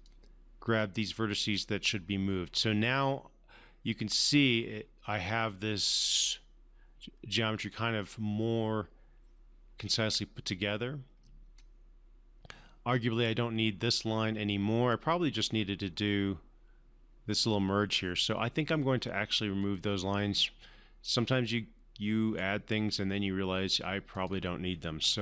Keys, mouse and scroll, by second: 11.9 scroll down 1, 19.9-22.8 right drag, 24.5 click.